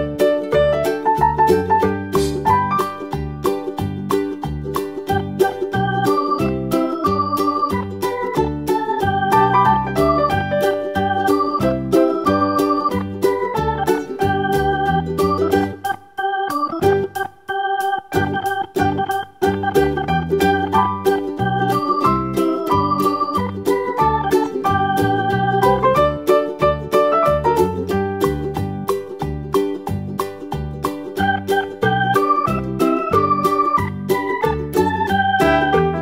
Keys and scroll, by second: 10.9 BackSpace, 11.7 BackSpace, 27.5 Left, 27.7 Left, 27.8 BackSpace, 28.1 BackSpace, 28.3 BackSpace, 33.0 d.